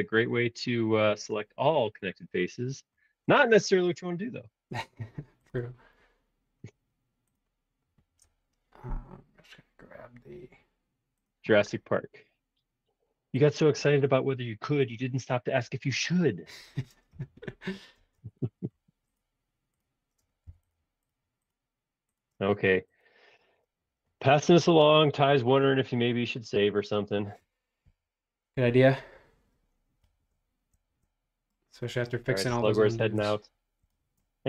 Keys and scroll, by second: 17.9 space, 20.5 b, 22.3 space, 22.7 Escape, 23.5 space, 24.7 ↶, 26.0 ↻, 27.8 super+s.